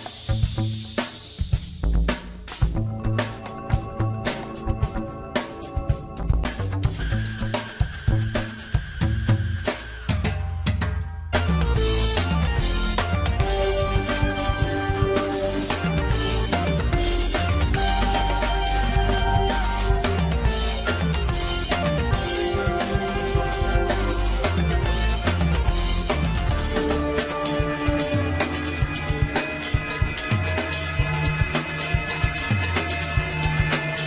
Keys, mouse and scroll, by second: 0.8 scroll up 9, 1.3 scroll down 3, 1.5 middle click, 2.3 g, 3.2 scroll up 3, 3.4 shift+middle click, 4.0 scroll up 1, 4.1-4.8 scroll down 1, 4.8 s, 5.4 Tab, 5.7 middle click, 6.6 click, 7.0 alt+shift+click, 7.2 alt+shift+click, 7.5-7.9 scroll up 2, 8.1 ctrl+b, 11.9 click, 12.2 scroll down 1, 12.3 middle click, 12.7 Tab, 13.0 Tab, 13.2 middle click, 14.1 alt+shift+click, 14.4 click, 14.8 alt+shift+click, 15.4 g, 16.7 middle click, 17.5 Tab, 17.7 scroll up 1, 17.9-18.3 middle drag, 18.3-19.0 scroll up 1, 19.8 click, 20.5 drag, 20.8-21.5 right drag, 21.5 scroll down 2, 21.8 middle click, 22.1 Tab, 22.4 middle click, 22.8 scroll up 1, 23.0 shift+middle click, 23.4-24.1 scroll up 1, 24.1 ctrl+b, 25.2 Tab, 25.4 scroll down 5, 25.6-26.3 middle drag, 26.3 KP_1, 27.2 click, 27.4-27.9 scroll down 2, 28.4 shift+z, 28.9 scroll up 1, 29.7-30.1 shift+middle drag, 30.1-30.6 scroll up 1, 30.8 g, 32.0-33.5 scroll up 6, 32.2 shift+middle drag, 32.8-33.2 shift+middle drag, 33.5 s.